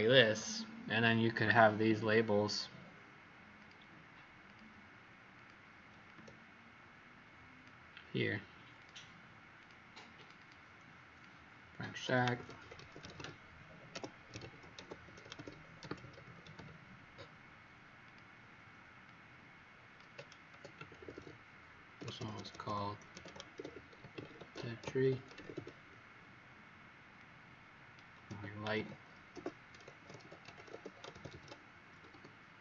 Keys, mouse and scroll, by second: 3.5 click, 4.4 shift+click, 5.3 click, 6.0 shift+click, 9.5 click, 10.1 click, 10.3 click, 11.1 click, 12.0-17.0 typing, 18.0 click, 20.2-25.9 typing, 27.1 click, 28.7-32.5 typing.